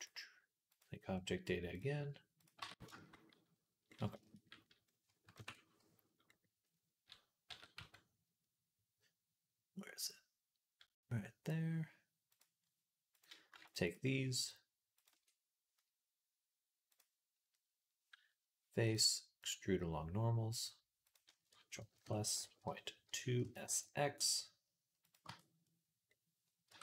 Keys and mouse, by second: 2.2 click, 2.4 Tab, 2.9-8.2 drag, 5.2 ctrl+KP_Add, 7.3 s, 8.2-21.8 right drag, 8.2 s, 13.0 click, 13.0 middle click, 13.5-14.9 alt+shift+drag, 13.5-14.9 alt+shift+middle drag, 16.7 click, 16.7 middle click, 18.7-21.0 drag, 18.7-21.0 middle drag, 21.8 ctrl+KP_Add, 22.5 ., 23.3 s, 25.1 Tab, 26.5 Tab, 26.5-26.8 right drag.